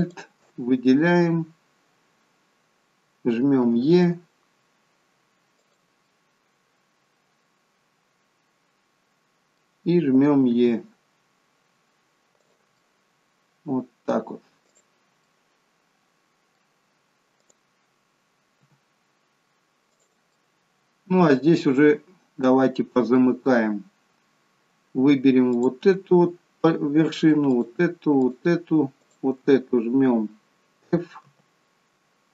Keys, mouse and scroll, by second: 0.0 alt+shift+click, 3.6 e, 6.1 middle click, 10.5 e, 12.8 middle click, 14.7 click, 15.3 middle click, 17.4 click, 18.6 g, 20.3 middle click, 22.2 scroll up 1, 22.4 middle click, 25.5 click, 27.5 shift+click, 28.3 shift+click, 29.0 shift+click, 31.2 f.